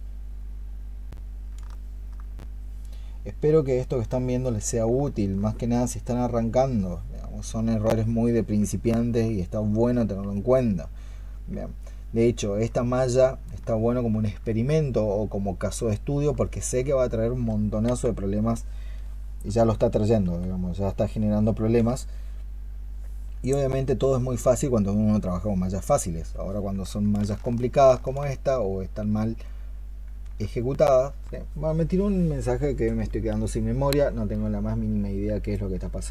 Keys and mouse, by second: 0.0 ¡, 1.6 alt+click, 4.9 alt+click, 8.7 alt+click, 11.7 alt+click, 13.5 alt+click, 16.3 alt+click, 23.6 i, 27.6 ctrl+shift+click, 35.3 right click.